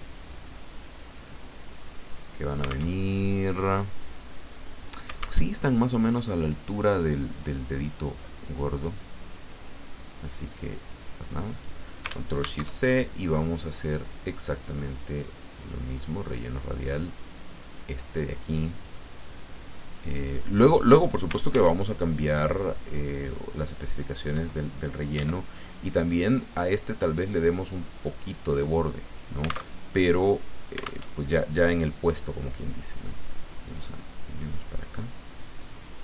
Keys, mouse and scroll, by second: 0.0-2.9 drag, 2.9 alt+Tab, 5.4 alt+Tab, 7.3 click, 9.3-11.8 drag, 12.4 ctrl+shift+c, 15.6 click, 16.8 scroll down 2, 17.7 click, 20.3 click, 21.5 ctrl+d, 21.9-24.3 ctrl+drag, 25.1 ctrl+d, 25.5-28.4 ctrl+drag, 29.1 alt+click, 29.7 alt+Tab, 31.1 alt+Tab, 33.6 click, 35.7-36.0 drag.